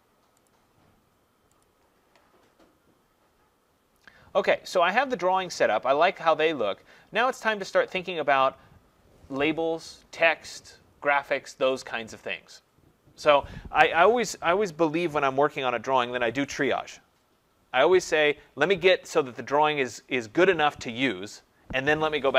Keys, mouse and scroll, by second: 0.5 click, 1.7 click, 7.7-8.2 scroll.